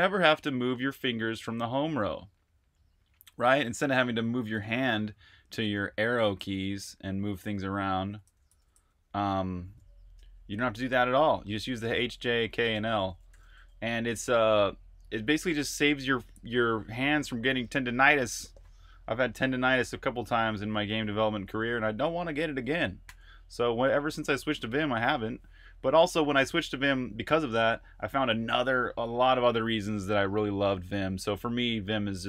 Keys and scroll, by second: 6.1 Right, 6.4-8.7 typing, 10.2 ↻, 11.3-13.4 typing, 15.3 typing, 21.9 ⟲, 22.9 j.